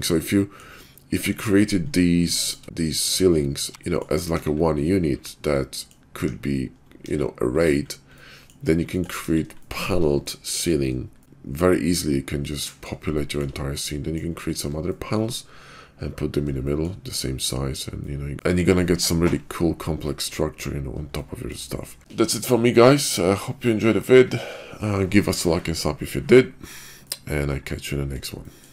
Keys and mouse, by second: 0.2 middle click, 3.8 middle click, 4.4 KP_5, 5.2-5.9 middle drag, 6.2 `, 7.1 KP_5, 7.6 click, 8.2-8.5 middle drag, 8.9 middle click, 9.3 KP_5, 9.6-10.0 shift+middle drag, 10.3 middle click, 11.2 click, 11.4 click, 11.7-12.9 middle drag, 13.2 shift+middle drag, 13.9 middle drag, 14.9 shift+middle drag, 16.7 shift+middle drag, 18.0 middle click, 20.1 middle click, 21.4 shift+middle click, 27.0-27.7 middle drag.